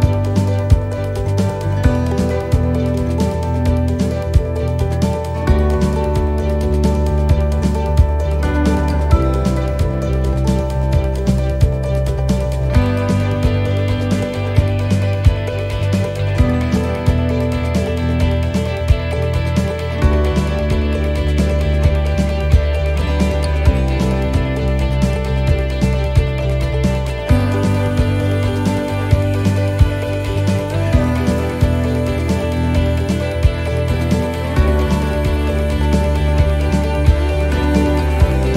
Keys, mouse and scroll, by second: 0.7-1.7 scroll up 2, 7.5 click, 7.5 shift+d, 9.6 scroll down 2, 10.4 scroll down 2, 10.5 click, 12.5 shift+right click, 15.3 shift+middle click, 15.7 scroll up 1, 16.3 right click, 16.3-16.6 scroll up 2, 29.3 scroll down 2, 29.7 shift+middle click, 30.4 middle click, 31.0 scroll up 1, 31.3 middle click, 31.9 shift+middle click, 32.3-32.7 scroll down 1, 33.3 right click, 34.4 shift+d, 36.2 click.